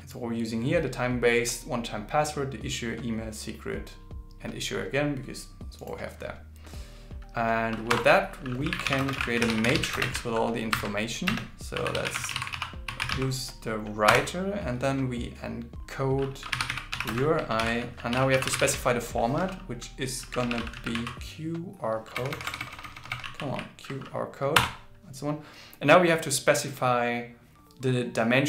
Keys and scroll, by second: 10.7 shift+0, 17.6 shift+b, 23.0-24.0 typing.